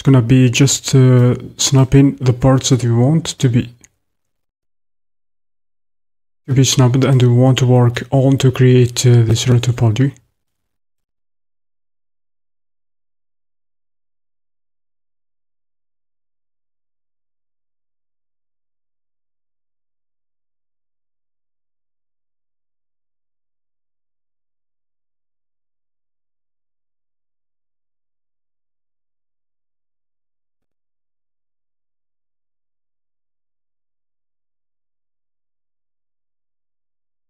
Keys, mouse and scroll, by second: 1.3-11.2 drag, 19.8-28.3 drag.